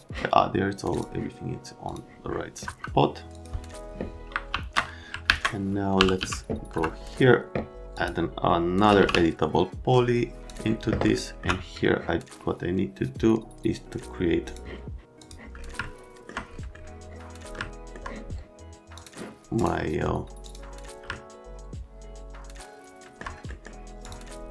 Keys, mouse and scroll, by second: 0.9 click, 1.9 click, 2.7 F3, 3.3 click, 4.5 z, 5.3 alt+q, 5.7-6.7 typing, 6.7 F3, 7.9 click, 8.6-9.5 typing, 10.4 click, 11.2 right click, 14.5 middle click, 15.2 middle click, 15.8 alt+right click, 17.6 alt+middle click, 18.9 click, 19.6 scroll down 1, 20.4 click, 21.1 alt+scroll up 1, 21.5-23.2 alt+right drag, 23.5 right click, 24.1 middle click.